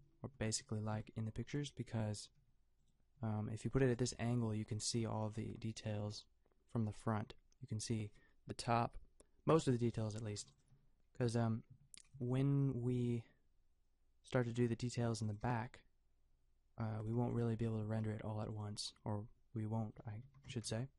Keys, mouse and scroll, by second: 2.4 g, 3.2 g, 4.1 a, 4.9-6.7 drag, 5.4 a, 12.1 r, 15.5 a, 17.7 r, 20.2 a, 20.7 KP_0.